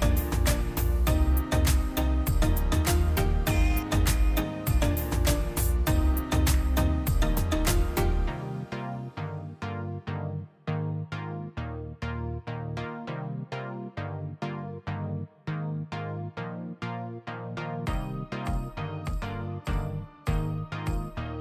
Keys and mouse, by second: 0.6 click, 2.6 click, 10.9 click, 12.3 click, 13.3-14.5 drag, 14.5-17.4 middle drag, 17.4 click, 17.8 shift+a, 21.2 click.